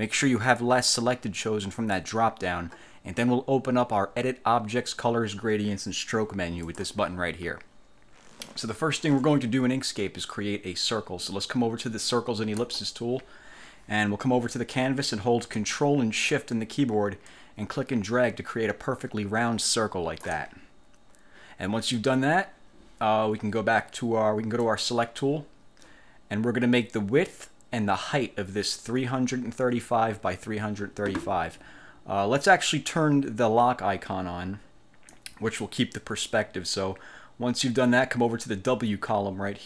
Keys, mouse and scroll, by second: 0.7 click, 1.9 click, 6.7 click, 12.7 click, 17.4-20.5 ctrl+shift+drag, 24.8 click, 35.3 click.